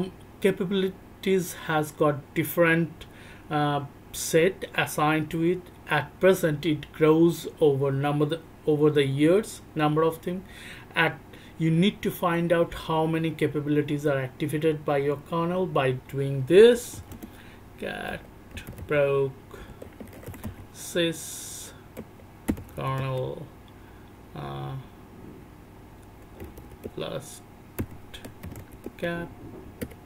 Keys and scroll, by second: 16.5 c, 16.7 c, 17.1-18.8 c, 19.8-23.5 typing, 26.4 l, 26.4 l, 26.8 Tab, 27.8 t, 28.4 t, 28.6 t, 28.8 Tab, 29.8 BackSpace.